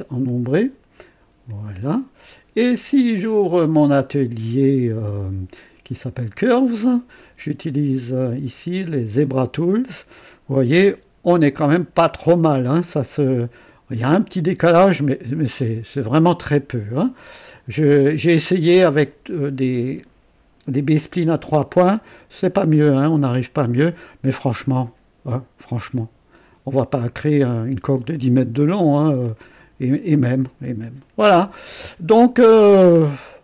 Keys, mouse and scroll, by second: 0.2 ctrl+click, 1.5 click, 6.4 click, 9.2 click, 10.3-17.2 drag, 22.9 click, 23.7-32.2 drag, 32.5-33.2 scroll down 1, 33.2 right click.